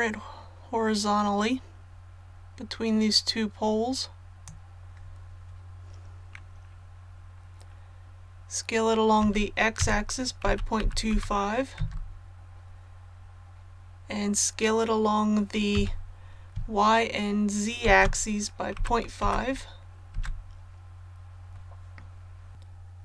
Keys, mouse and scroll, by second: 9.2-11.1 typing, 15.7 s, 17.8 shift+x, 18.7 KP_Decimal, 19.2 KP_5, 22.5-23.0 scroll up 1.